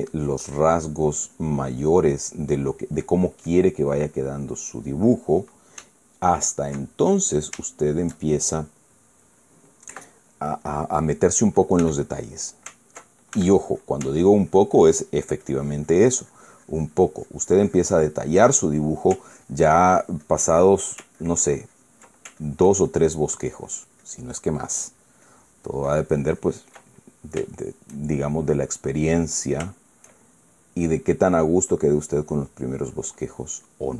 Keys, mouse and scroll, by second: 0.0-2.5 drag, 3.6 right click, 4.6 click, 5.2-6.3 drag, 6.5 Caps_Lock, 6.7 middle click, 7.6 middle click, 8.4-9.4 shift+middle drag, 10.6 KP_Add, 11.4 middle click, 12.5 f, 12.9 click, 14.1 ctrl+f, 14.5 ctrl+click, 14.9-21.2 ctrl+drag, 21.4 ctrl+click, 21.7-23.0 ctrl+drag, 23.1-27.5 ctrl+drag, 27.6 ctrl+middle click, 28.2-29.2 ctrl+shift+middle drag, 29.3-31.5 shift+middle drag, 31.6 middle click, 32.6 click, 33.5 click.